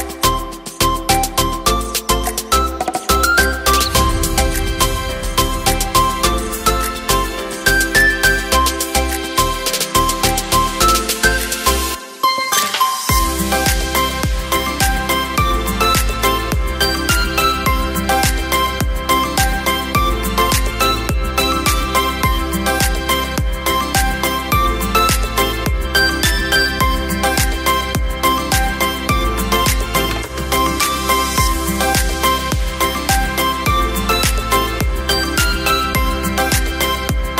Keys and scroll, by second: 29.0 space.